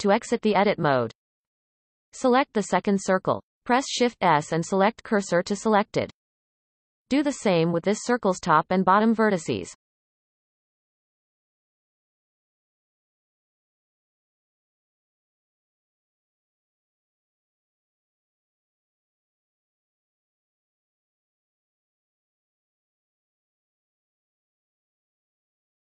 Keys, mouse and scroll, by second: 1.0 click, 2.0 shift+s, 3.3 Tab, 3.7-5.4 shift+middle drag, 5.4 click, 6.5 shift+d, 7.3 r, 10.4 e, 12.1 click, 12.7 shift+click, 13.1 x, 16.0 click, 16.5 shift+click, 17.4 f, 17.8 click, 18.3 shift+click, 19.1 f, 20.7 click, 21.1-22.1 shift+middle drag, 22.1 shift+d, 22.9 r, 25.4 e.